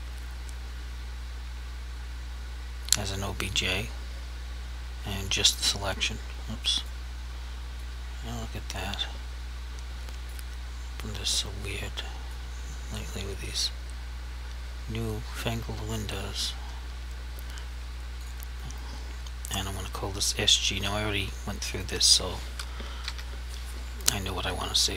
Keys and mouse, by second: 3.5 click, 10.0 click, 11.4 click, 12.4 click, 18.2 click, 21.8 click, 22.8 typing, 24.8 click.